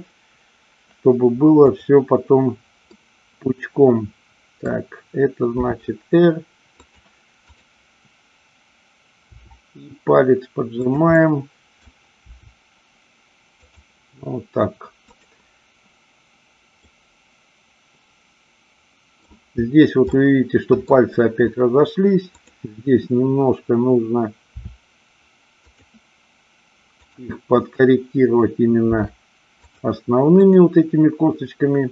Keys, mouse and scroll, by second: 3.0-4.6 middle drag, 5.6 r, 6.9 click, 9.3 r, 10.8 click, 11.2 middle click, 12.2 r, 13.7 click, 16.8-19.2 middle drag, 20.2-20.8 middle drag, 24.4 r, 25.7 drag, 27.0-28.3 drag, 28.9 r, 29.6 click.